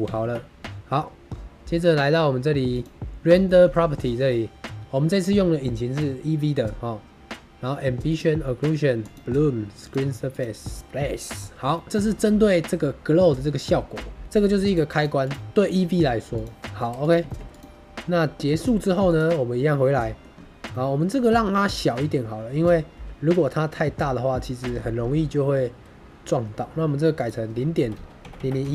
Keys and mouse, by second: 3.3 shift+middle click, 4.0 shift+middle click, 8.0 click, 8.9 click, 9.7 click, 11.6 shift+middle click, 14.6 click, 14.9 click, 15.2 click, 16.3 click, 17.2 shift+middle drag, 18.3 click, 19.0 click, 19.7-20.1 middle drag, 20.6 middle drag, 20.8 click, 20.8 middle click, 21.4 middle click, 27.2-28.7 drag, 28.3 KP_0.